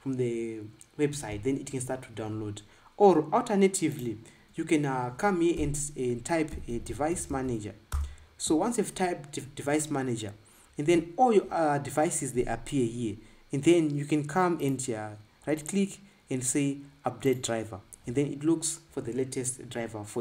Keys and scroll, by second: 6.5-8.1 typing, 8.2 Return.